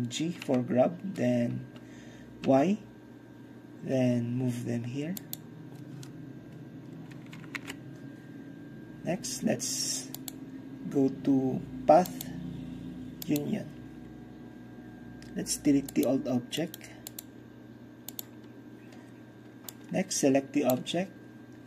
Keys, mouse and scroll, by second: 0.5 g, 2.5 y, 5.3 click, 7.7 ctrl+KP_9, 10.2-11.2 drag, 12.2 click, 13.3 click, 16.0-16.7 drag, 17.2 click, 18.2 click, 19.8-21.4 drag.